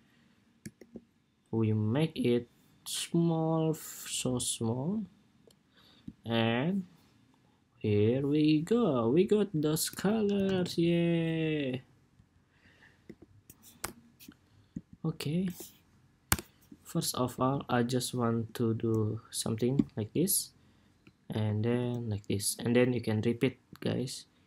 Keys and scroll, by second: 0.5 super+2, 10.0 super+=, 18.5 ctrl+c, 21.5 ctrl+c.